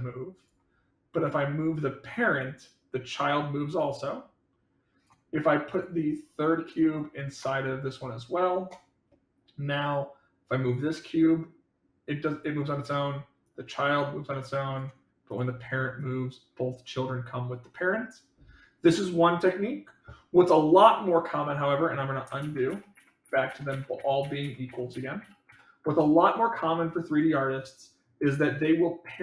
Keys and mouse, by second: 1.1 click, 2.4-4.9 drag, 6.7-8.1 drag, 10.6-12.3 drag, 12.7 click, 13.4-14.7 drag, 15.2 click, 15.9-18.8 drag, 22.4 ctrl+z, 22.6 ctrl+z, 24.6 ctrl+z, 27.0 click.